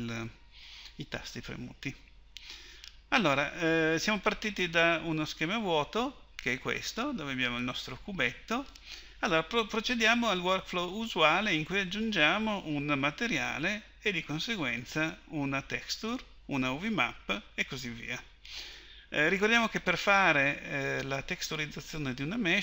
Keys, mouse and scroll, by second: 17.8-22.6 middle drag.